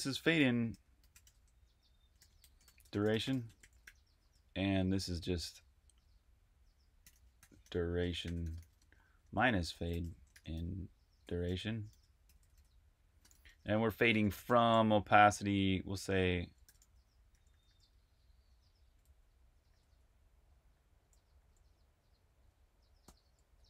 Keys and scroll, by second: 0.0-4.2 typing, 6.7-10.5 typing, 11.6-17.6 typing, 19.0-21.3 typing, 22.9-23.6 typing.